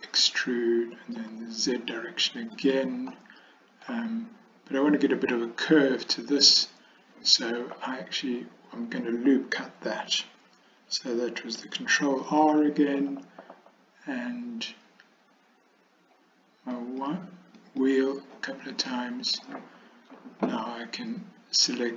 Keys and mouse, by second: 0.1 e, 3.2 middle click, 12.3 ctrl+r, 19.0 middle click.